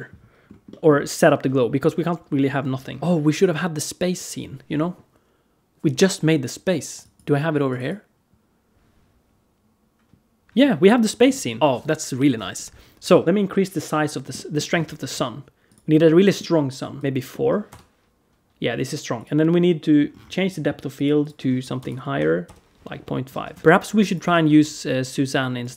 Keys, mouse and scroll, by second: 0.3 scroll up 1, 0.5 middle click, 3.0 shift+a, 11.6 shift+middle click, 11.6-13.2 scroll down 5, 11.6 z, 13.2 click, 14.2 middle click, 14.5-15.0 scroll down 3, 14.7 alt+shift+z, 15.5 click, 15.7 scroll up 2, 16.0 middle click, 16.8 click, 17.0 click, 17.1 middle click, 17.5 KP_0, 19.0 click, 19.9 scroll down 3, 20.8 click, 23.1 alt+a, 23.5 ctrl+s, 23.6 ctrl+z, 23.6 click, 23.8 x, 24.1 shift+a.